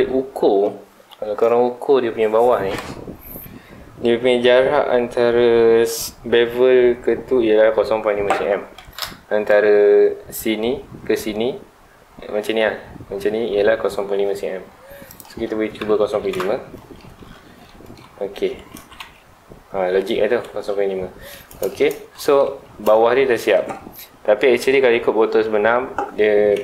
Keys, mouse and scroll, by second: 15.0-16.3 drag, 16.3 KP_Enter, 17.0 scroll down 2, 17.2-17.6 scroll up 2, 17.6 shift+middle click, 18.3-18.7 scroll up 2, 18.7 alt+a, 18.9 Tab, 19.2-19.8 scroll down 2, 19.8 scroll up 2, 19.9 Tab, 20.3 middle click, 20.9 scroll up 1, 21.1-22.4 middle drag, 22.4 Tab, 22.6-23.1 scroll down 1, 23.1 scroll up 1, 23.3-26.4 middle drag, 26.5 Tab.